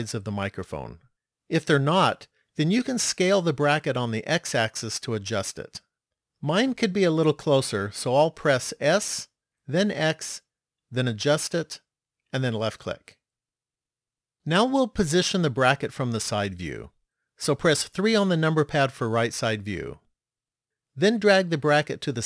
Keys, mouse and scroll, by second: 9.0 s, 14.9-16.2 scroll down 4, 16.2-17.2 scroll down 1, 17.9 KP_3, 21.9 click.